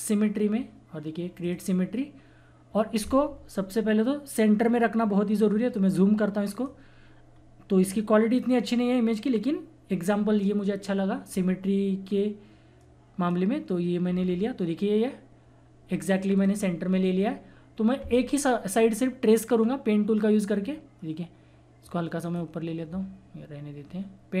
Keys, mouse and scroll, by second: 1.3 click, 3.7-4.3 scroll up 1, 5.8-7.8 drag, 7.3-7.8 scroll up 1, 7.8-9.9 drag, 9.9 scroll down 1, 12.8 click, 14.0 scroll down 1, 16.3 click, 16.8-18.7 scroll up 1, 18.7 scroll down 1, 21.4 scroll up 1, 21.8-24.4 drag.